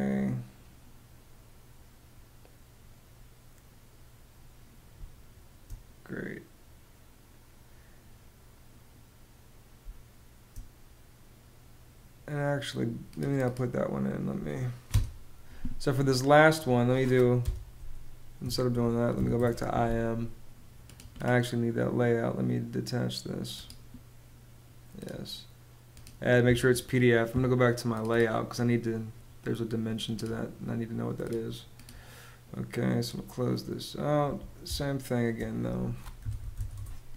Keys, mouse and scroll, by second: 4.6 space, 9.3 space, 14.4 BackSpace, 16.9 m, 18.0 BackSpace, 18.2 i, 18.9 Return, 34.2 space, 35.5-36.5 typing.